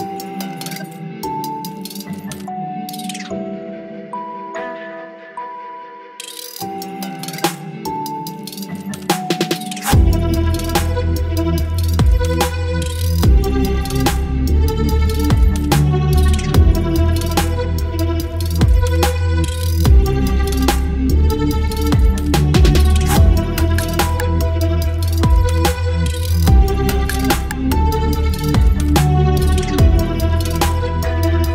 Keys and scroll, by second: 6.8 ctrl+t, 12.9 ctrl+e, 15.8 space, 24.1 ctrl+t, 29.5 Return, 30.4 space.